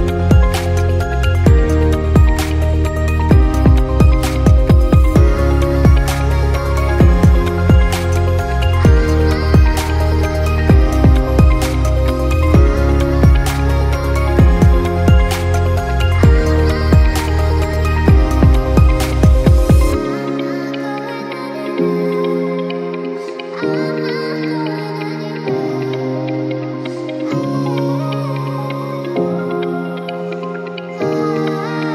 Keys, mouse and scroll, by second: 1.7 click, 2.8 click, 3.2-3.9 drag, 6.5 click, 7.6-8.9 drag, 8.9-9.5 middle drag, 9.5-10.4 scroll up 2, 10.4 click, 11.5-12.7 drag, 12.9-13.7 scroll down 4, 13.7-14.1 scroll down 1, 14.1-15.6 middle drag, 15.6-16.3 scroll up 4, 16.7-18.6 shift+middle drag, 19.0-21.0 middle drag, 21.2 click, 22.3 click, 23.1-24.5 drag, 26.3-28.4 drag, 29.3-30.0 scroll down 1, 30.0 click, 31.0-31.6 scroll up 2, 31.6-31.9 scroll up 2.